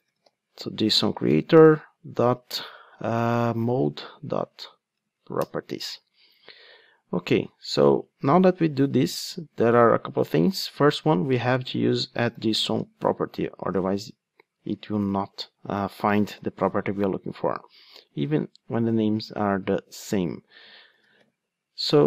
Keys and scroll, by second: 1.3 Return, 13.2 Return.